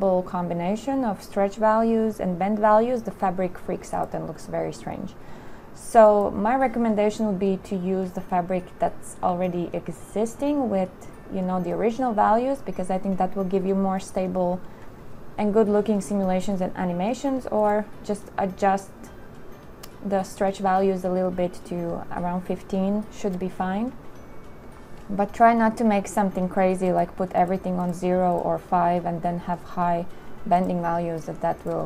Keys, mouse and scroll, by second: 6.5 click.